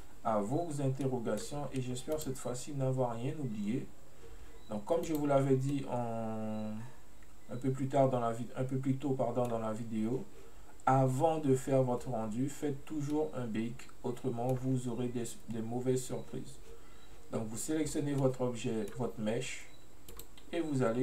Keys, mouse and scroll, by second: 1.1-2.2 middle drag, 2.2 click, 5.1 click, 5.8-8.8 middle drag, 13.2-16.2 middle drag, 18.3-20.2 middle drag, 20.2 click.